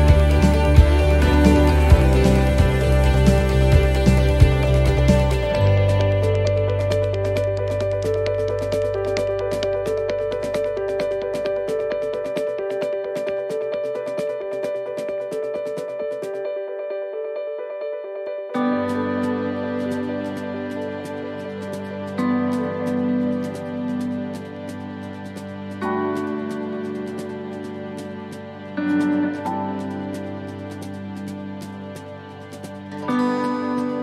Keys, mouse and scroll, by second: 2.9 click, 3.2 middle click, 3.7-4.0 scroll down 2, 4.3 middle click, 4.3-5.0 scroll down 3, 5.7 click, 6.9 middle click, 7.5 scroll down 1, 8.0 middle click, 8.3 scroll down 1, 8.9-9.6 scroll up 2, 9.2 middle click, 9.6-9.9 scroll down 2, 9.9 middle click, 10.3 scroll up 1, 10.8 shift+middle click, 11.4 scroll up 1, 11.5 middle click, 13.6 click, 16.7 click, 17.8 middle click, 18.3-19.1 scroll down 2, 18.7 middle click, 19.1-19.9 scroll up 2, 19.5 middle click, 20.3-20.7 scroll down 1, 20.7 middle click, 21.7 middle click, 23.2 shift+middle click, 23.4 shift+middle click, 23.8 middle click, 24.3 shift+middle click, 24.8 scroll down 1, 25.2 shift+middle click, 25.5-26.2 scroll up 2, 25.9 middle click, 26.3 shift+middle click, 26.9-27.3 scroll down 1, 27.5 scroll down 1, 27.9 shift+middle click, 28.7 middle click, 29.2 shift+middle click, 30.4 shift+middle click, 31.0 ctrl+middle click, 31.6 shift+middle click, 32.1 middle click, 32.9 shift+middle click.